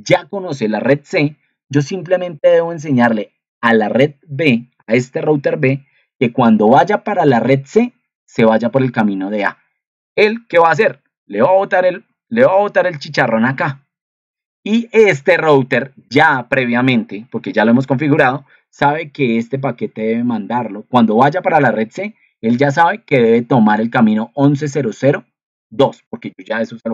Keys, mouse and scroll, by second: 10.6 ctrl+2.